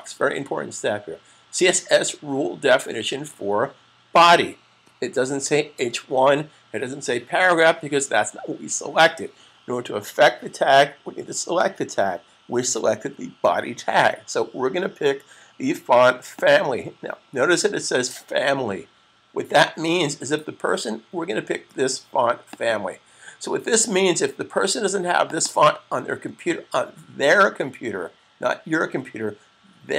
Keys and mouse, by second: 16.1 click, 22.2 click, 24.8 click, 25.1 double click.